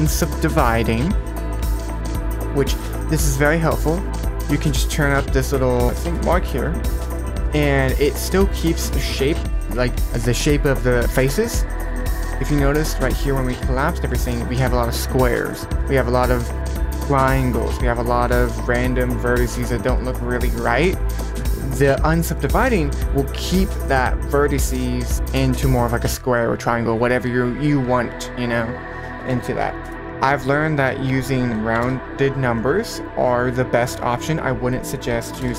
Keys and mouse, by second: 4.1-6.2 drag, 7.1 middle drag, 7.5 middle drag, 8.0 middle click, 8.4 middle click, 12.1 middle drag, 21.5 click, 22.3 middle click, 28.4-29.9 drag, 30.8-32.0 drag, 32.5-33.0 middle drag, 34.2-35.4 drag.